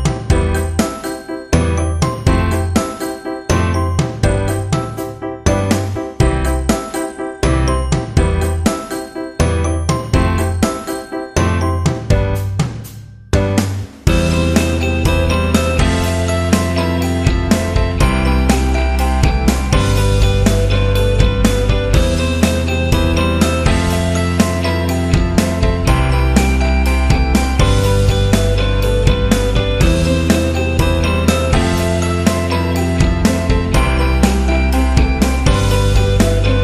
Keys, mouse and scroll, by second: 0.7-1.6 alt+scroll down 3, 2.0-2.3 ctrl+scroll up 2, 3.0 click, 4.0 alt+scroll up 1, 4.8 ctrl+scroll down 1, 6.0-7.1 scroll up 1, 7.5 shift+click, 11.8 click, 15.6-18.3 alt+shift+drag, 18.3 scroll down 1, 18.6 alt+scroll up 1, 19.9-20.3 alt+scroll up 1, 22.0 click, 23.2-27.3 alt+drag, 27.3-28.1 scroll up 1, 28.1 click, 31.8-33.7 drag, 34.4 right click, 35.0 click, 35.6 alt+scroll down 1, 36.1 click.